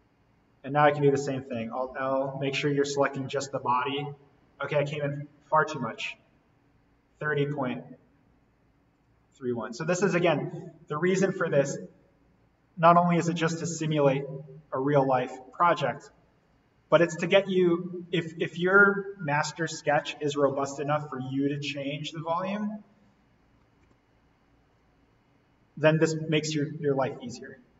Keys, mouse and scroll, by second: 1.5 alt+l, 2.4 click, 8.9 click, 10.3 right click, 11.6 click, 16.8 click, 21.0 click, 23.6 click, 23.8 alt+l, 24.6 click, 27.1 click.